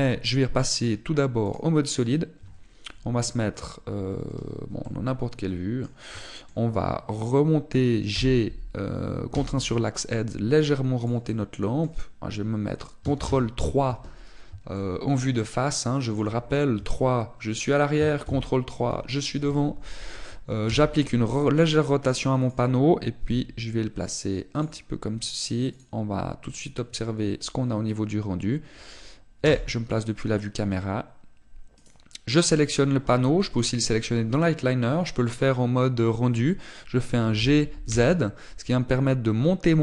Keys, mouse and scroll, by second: 0.6 click, 1.7 click, 5.7 middle click, 7.1 shift+middle click, 9.1 g, 12.1 click, 12.2 middle click, 14.1 ctrl+KP_3, 15.7 shift+middle click, 17.7 KP_3, 19.1 ctrl+KP_3, 21.6 r, 24.1 click, 24.1 g, 26.0 click, 26.6 click, 30.4 KP_0, 32.7 right click, 34.5 click, 38.3 g.